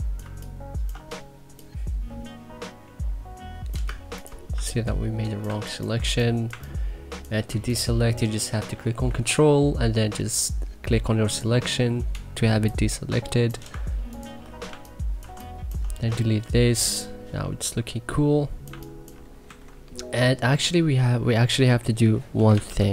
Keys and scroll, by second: 0.0-0.6 typing, 4.5-7.4 typing, 14.6 2, 16.4 Delete, 16.8 3, 18.7 1, 19.4 c, 22.2-22.9 typing.